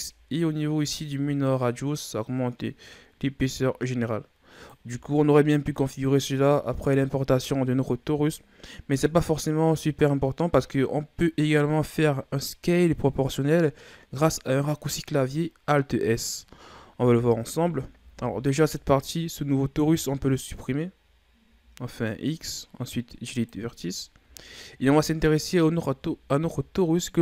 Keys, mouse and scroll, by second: 1.1-4.1 drag, 8.6 scroll down 1, 16.9 Tab, 17.9 Tab, 20.0-21.0 scroll down 8, 21.0-21.3 scroll up 3, 21.5 Delete, 24.0-25.2 scroll down 11, 25.2-26.2 scroll up 7, 26.2-26.7 ctrl+scroll up 3.